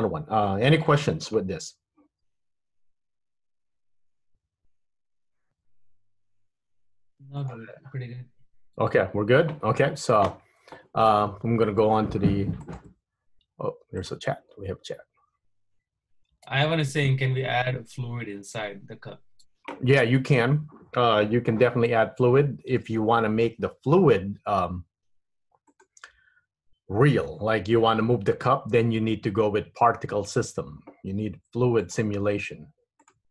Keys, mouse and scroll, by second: 11.2 middle click, 31.9 click, 33.1 click.